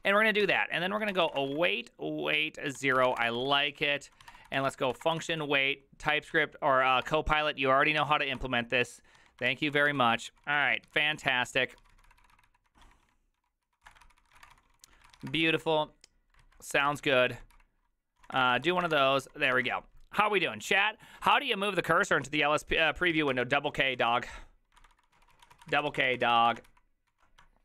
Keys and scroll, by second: 0.0-5.7 typing, 6.8-19.8 typing, 14.0 ctrl+c, 14.2 ctrl+c, 14.4 ctrl+:, 16.4 Return, 16.4 alt++, 16.4 alt+{, 16.9 ctrl+c, 23.3 alt+{, 23.3 ctrl+c, 23.4-24.6 typing, 24.8 ctrl+d, 24.9 ctrl+d, 26.7 ctrl+u, 26.7 ctrl+w, 27.1 ctrl+j.